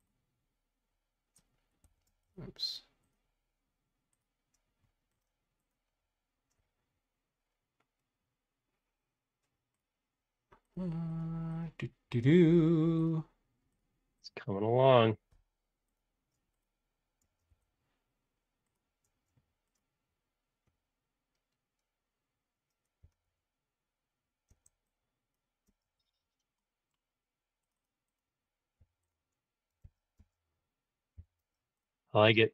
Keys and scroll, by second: 1.8 Home, 2.0 space, 2.6 Escape, 17.2 space, 17.4 Escape, 22.9 e, 25.7 space, 25.9 Escape, 28.8 b, 29.8 super+z, 30.2 space, 31.1 b.